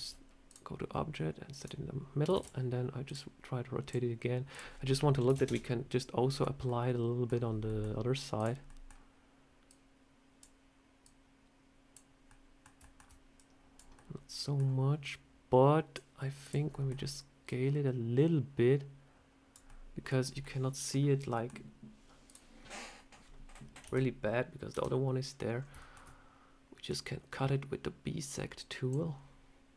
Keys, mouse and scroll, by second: 0.4 click, 2.2 shift+d, 2.9 click, 3.8 click, 5.2 click, 6.2 middle click, 6.5 middle click, 7.5 middle click, 8.2 click, 8.6 middle click, 9.6 click, 10.9 click, 12.1 scroll up 1, 12.2 middle click, 12.7 shift+middle click, 13.2 click, 13.8 middle click, 14.9 click, 16.3 click, 16.6 middle click, 17.3 click, 19.6 middle click, 20.1 scroll up 2, 20.3 middle click, 21.2 middle click, 22.1 click, 23.7 KP_1, 24.6 KP_3, 25.5 scroll up 3, 25.7 shift+middle click, 26.8 click.